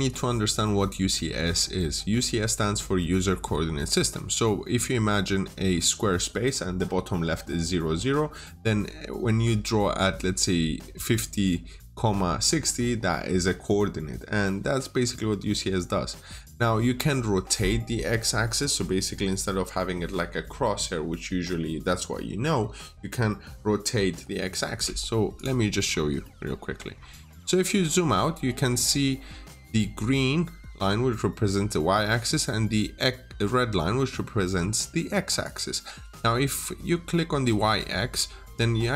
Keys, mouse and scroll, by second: 25.2 click, 25.7-26.1 scroll down 1, 26.1 middle click, 26.4-27.5 scroll down 1, 28.1 middle click, 35.3 click.